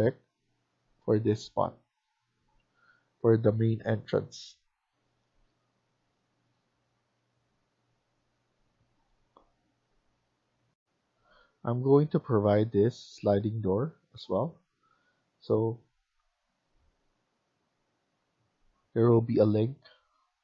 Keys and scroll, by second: 1.4 Escape, 1.6 Escape, 5.7 Escape, 6.0 Escape, 10.6 F1.